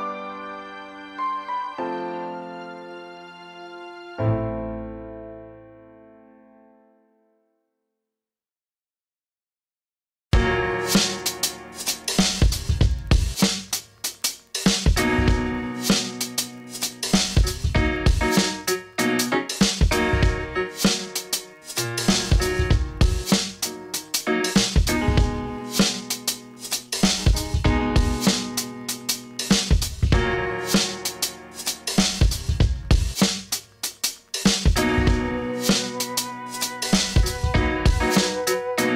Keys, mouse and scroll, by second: 0.4 right click, 1.6 click, 4.3 click, 8.6 v, 8.7 click, 9.2 space, 9.3-9.7 click, 9.6 space, 9.7 scroll down 1, 10.0 click, 10.2 space, 11.2-12.5 drag, 14.7 click, 22.5 click, 25.7 click, 28.5-29.7 drag, 34.6-37.1 drag.